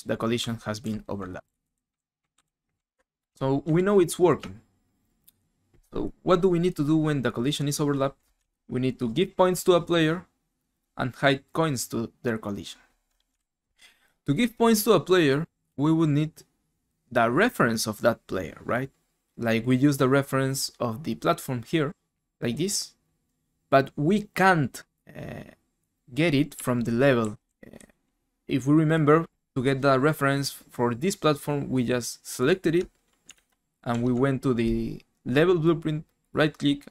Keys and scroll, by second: 0.4-5.2 typing, 3.7 alt+Tab, 13.4 ctrl+super+Left, 13.4 ctrl+super+Right, 26.5-28.6 typing, 33.3 alt+Tab, 33.9 alt+Tab.